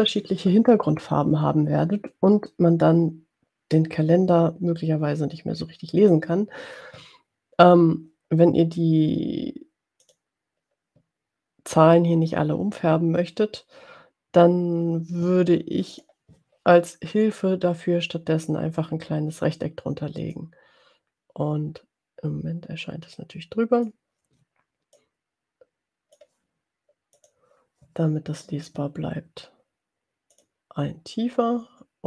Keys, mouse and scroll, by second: 10.3 click, 15.9 click, 20.6-24.0 drag, 24.9-26.3 drag, 27.2 click, 30.3 click.